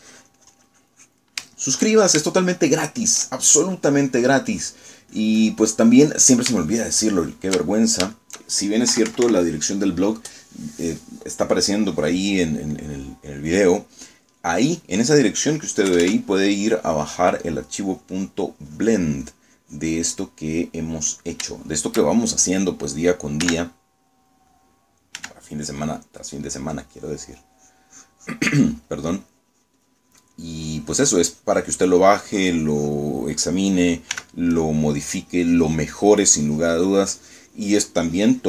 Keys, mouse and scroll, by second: 0.6-2.4 drag, 2.5 shift+middle click, 3.4-5.0 shift+middle drag, 5.6-7.0 drag, 7.1 middle click, 7.7 shift+middle click, 9.4 shift+middle click, 10.0 KP_Subtract, 10.8 middle click, 13.4 middle click, 14.4 middle click, 15.6 middle click, 17.0 KP_Add, 17.8-21.3 drag, 21.4 middle click, 22.6 shift+middle click, 24.6 3, 25.2 middle click, 26.3 f, 26.8 click, 27.7 click, 28.2-34.2 drag, 35.2 s, 35.6-38.4 drag.